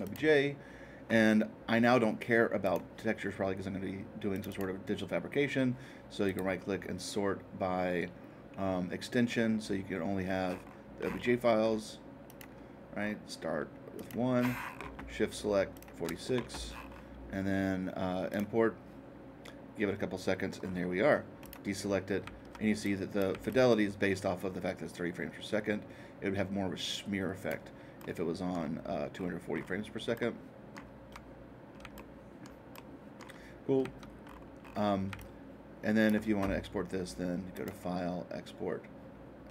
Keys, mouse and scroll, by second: 0.0-2.0 drag, 2.6-4.6 drag, 6.2-8.3 right drag, 10.4-12.2 middle drag, 12.2-14.3 drag, 14.3-15.3 middle drag, 15.7-16.7 shift+drag, 16.6-18.3 middle drag, 18.3-20.3 drag, 20.6 middle click, 21.4 click, 22.8 click, 23.4-25.5 alt+drag, 28.4 alt+middle click, 29.1-31.5 alt+middle drag, 34.6 middle click, 35.1-37.2 alt+drag, 37.5-39.5 drag.